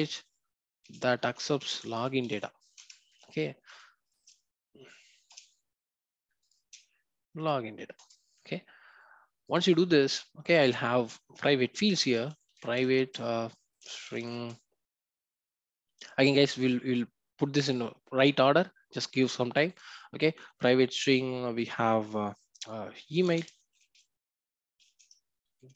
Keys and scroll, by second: 1.9 Return, 7.9 Return.